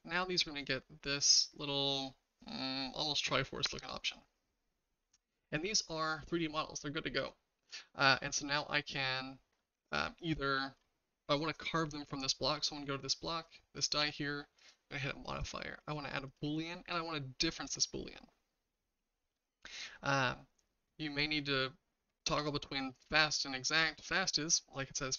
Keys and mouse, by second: 6.0-7.6 shift+middle drag, 15.5-16.4 drag, 17.6 click.